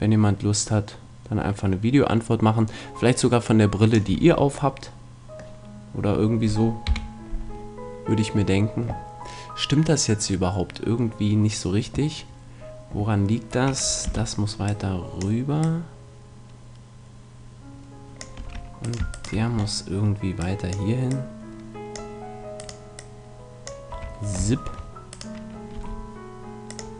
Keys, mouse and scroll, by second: 4.1 a, 4.3-6.9 middle drag, 6.9 KP_1, 14.0 b, 15.6-17.5 drag, 18.4 a, 18.8-20.7 right drag, 20.4 click, 20.4 middle click, 20.9-22.5 drag, 23.9 a, 25.7 g.